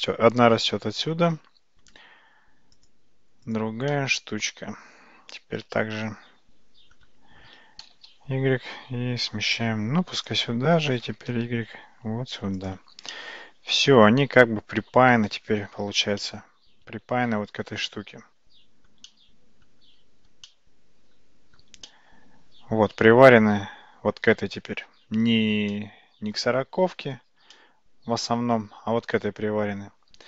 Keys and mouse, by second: 2.8 click, 3.5 click, 4.0-7.0 middle drag, 7.9 g, 11.1 g, 13.2-15.5 middle drag, 16.0 alt+z, 16.3-17.7 middle drag, 18.0-19.0 middle drag, 19.1-19.8 middle drag, 20.6-21.6 shift+middle drag, 21.9-23.4 middle drag, 25.8-26.4 shift+middle drag, 27.6-28.8 shift+middle drag.